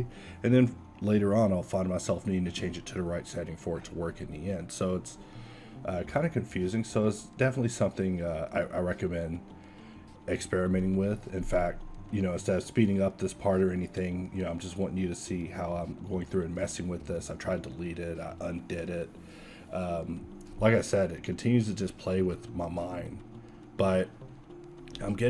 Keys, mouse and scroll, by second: 16.1 ctrl+z.